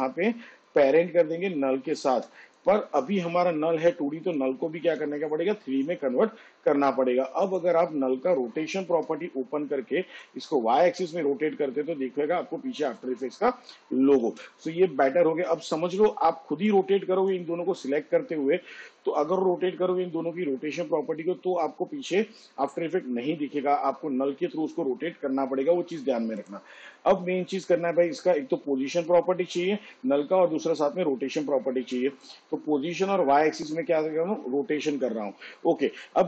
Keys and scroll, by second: 8.8 r, 14.2 ctrl+z, 29.0 p, 30.4 shift+r.